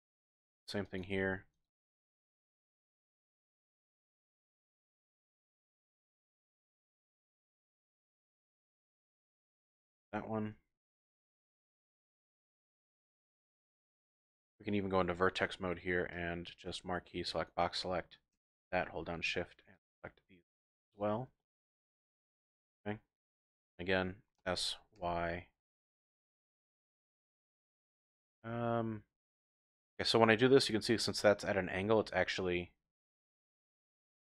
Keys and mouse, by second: 0.0 click, 0.3 ctrl+r, 1.0 click, 1.2 ctrl+r, 2.2 click, 2.7 ctrl+r, 3.1 click, 3.5 ctrl+r, 3.8 click, 4.1 ctrl+r, 5.4 click, 5.8 ctrl+r, 6.5 click, 6.8 ctrl+r, 7.5 click, 7.7 ctrl+r, 8.2 click, 9.6 ctrl+z, 10.4 ctrl+r, 11.0 click, 11.3 ctrl+r, 11.9 click, 12.1 ctrl+r, 12.9 click, 13.2 ctrl+r, 13.6 click, 13.9 ctrl+r, 14.3 click, 15.0 1, 16.1-17.5 drag, 19.7-21.0 shift+drag, 21.8-22.5 typing, 22.5 middle click, 24.4 s, 25.0 y, 32.0 middle click, 33.9 middle click, 34.1 click.